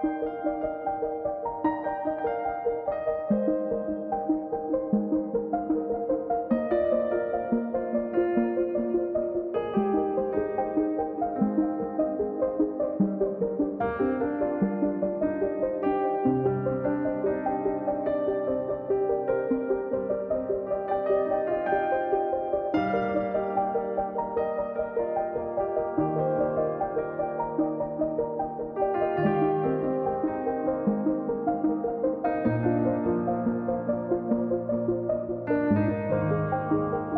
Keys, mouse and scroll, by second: 2.8 middle click, 3.1-4.2 drag, 8.1 middle click, 8.6-9.7 drag, 10.1 middle click, 10.3-11.5 drag, 12.1 middle click, 12.7 click, 13.5 middle click, 13.9-15.4 drag, 16.8 middle click, 17.6 click, 18.5 middle click, 18.8-20.0 drag, 21.3 middle click, 21.5 click, 22.1 middle click, 22.5 click, 23.4 middle click, 23.7-24.9 drag, 26.6 middle click, 27.3-28.5 drag, 28.8-30.6 middle drag, 30.6-31.9 drag, 33.0 middle click, 33.2-34.3 drag.